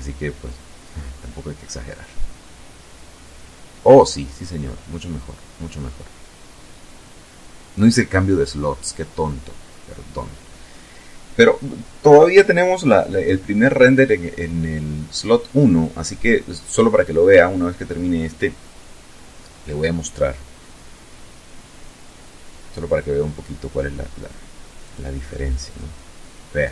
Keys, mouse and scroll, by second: 23.7 click, 24.5 click.